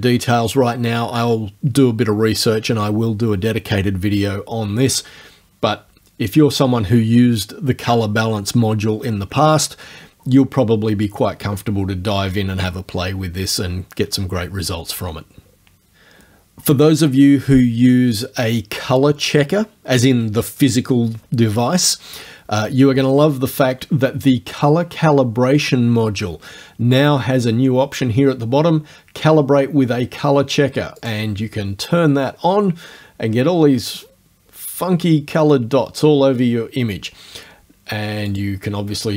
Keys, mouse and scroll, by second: 31.1 click, 38.3 click.